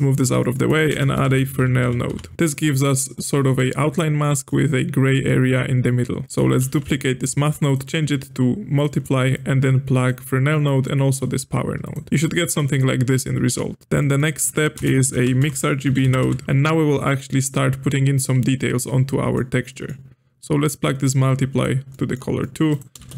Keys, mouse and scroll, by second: 0.1 click, 0.3 middle click, 0.6 click, 0.9 space, 2.5-3.1 middle drag, 3.1 scroll up 1, 3.4-6.2 shift+middle drag, 6.2 click, 6.3 click, 6.5 shift+d, 7.6-9.3 drag, 10.6-11.6 drag, 11.8 ctrl+shift+click, 12.1-13.8 middle drag, 13.8 scroll down 1, 13.8 scroll up 4, 14.0 middle click, 14.3 click, 14.7 space, 17.8-18.2 scroll up 2, 18.2-20.6 middle drag, 20.6-21.9 drag, 21.9 middle click, 22.7 click, 22.9 space.